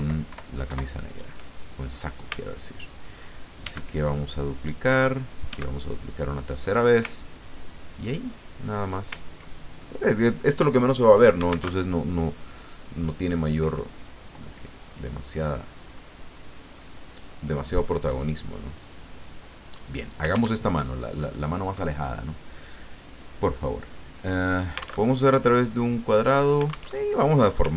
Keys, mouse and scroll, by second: 0.7 alt+Right, 2.5 ctrl+scroll down 2, 3.6 d, 4.1-5.4 drag, 5.4 d, 5.7-6.9 drag, 7.2-7.7 ctrl+scroll down 2, 7.8 ctrl+scroll down 2, 8.4 ctrl+scroll down 3, 8.9 scroll up 3, 9.2-9.8 ctrl+scroll down 4, 11.7 alt+Tab, 14.4-14.8 scroll up 2, 15.0-15.3 scroll down 2, 15.9 click, 18.5-19.6 drag, 20.5 alt+Tab, 23.1 click, 24.4 click, 25.4 alt+Tab, 26.9 alt+Tab.